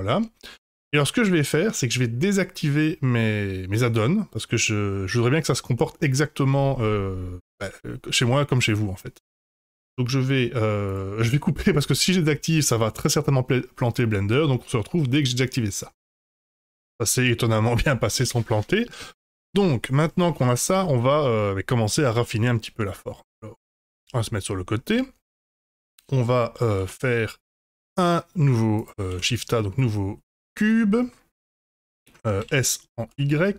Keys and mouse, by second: 5.7 middle drag, 9.9 click, 10.8 click, 15.9 F5, 19.2-20.4 middle drag, 21.0-22.8 middle drag, 23.8 KP_1, 26.7 ctrl+a, 28.7 click, 29.1 shift+a, 31.4-32.0 middle drag, 32.3 s.